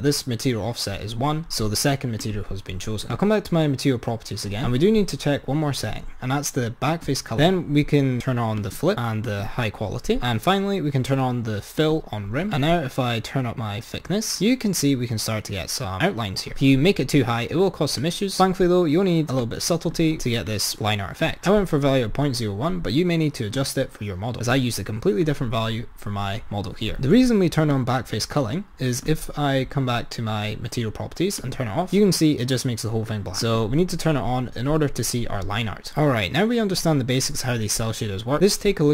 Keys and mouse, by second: 2.3 click, 3.2-5.6 drag, 7.1 click, 8.6 click, 9.3 click, 10.1-12.1 drag, 12.8-15.0 drag, 18.0-20.7 drag, 23.6 click, 24.6 click, 27.7-30.7 drag, 31.5 click, 33.5 click, 36.0-37.6 drag.